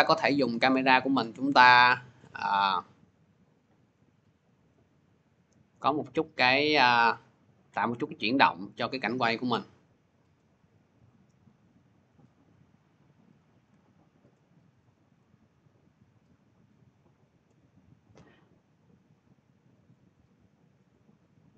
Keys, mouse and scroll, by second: 10.1 shift+click, 12.1 click, 14.0 shift+click, 14.7 click, 17.1 shift+click.